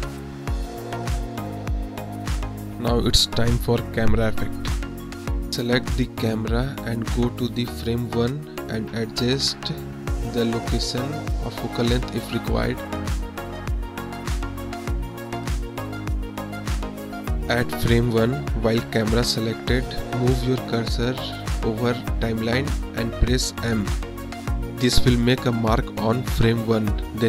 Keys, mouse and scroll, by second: 1.0 click, 3.1 click, 4.2 click, 5.9 click, 8.7 click, 9.9 Right, 15.2-17.9 drag, 18.2-19.6 drag, 22.1 space, 22.8 space, 24.1 click, 26.2 m.